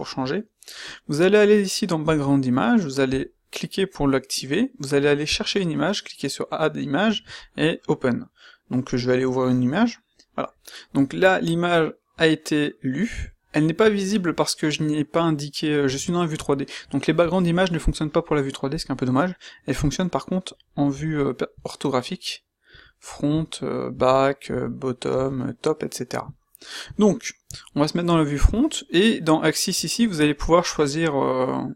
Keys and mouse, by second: 19.7 q, 21.5 q, 22.6-25.1 typing, 26.8 q.